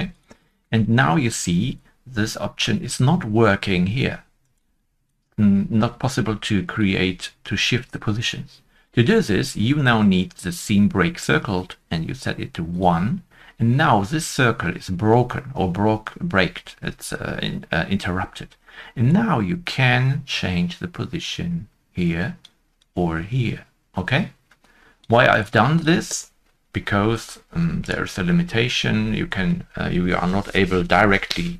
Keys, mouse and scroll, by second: 0.5 shift+middle click, 0.5 scroll down 1, 4.4 Tab, 4.4 shift+middle click, 4.4 scroll down 1, 4.4 shift+middle click, 4.4 click, 27.8 click.